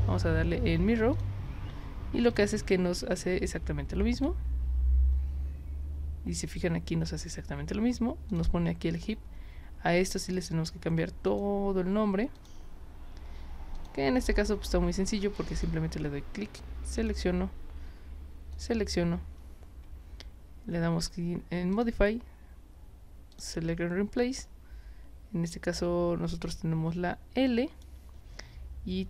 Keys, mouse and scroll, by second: 1.1 click, 2.3 click, 3.1-4.2 drag, 8.3 click, 10.2 click, 11.3 click, 12.3 click, 13.8 click, 15.5 click, 17.0 shift+click, 18.6 ctrl+click, 21.7 click, 23.3 click, 27.5 click.